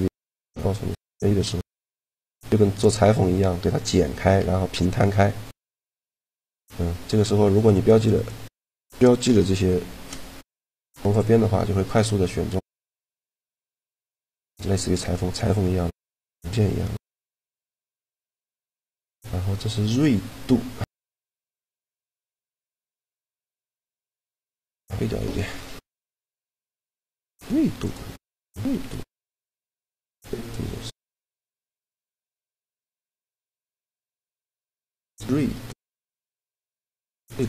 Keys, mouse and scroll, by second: 7.3-9.4 right drag, 9.4 shift+g, 11.8 g, 13.7 g, 17.5 shift+g, 22.1 middle click, 22.9-24.2 ctrl+z, 24.5 ctrl+z, 25.1 a, 25.6 click, 26.2-27.4 right drag, 31.4 shift+g, 33.2-35.0 right drag, 33.6 shift+g, 37.0-37.4 drag.